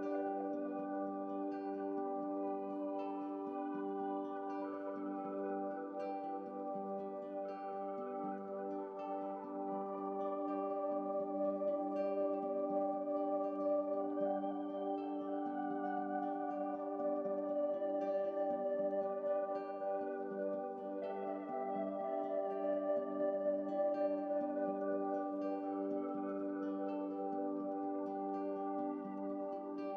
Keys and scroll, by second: 1.2 Right, 1.2 ctrl+u, 14.9 ctrl+z, 14.9 x, 24.9 ctrl+z.